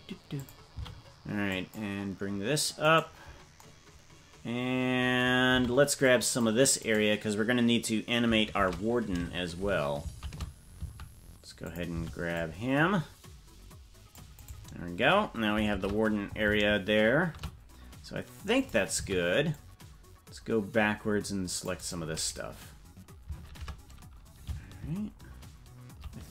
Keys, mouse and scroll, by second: 0.7 c, 5.4 c, 8.6 shift+`, 11.9 shift+c, 15.6 shift+`, 18.9 c, 23.4 shift+`.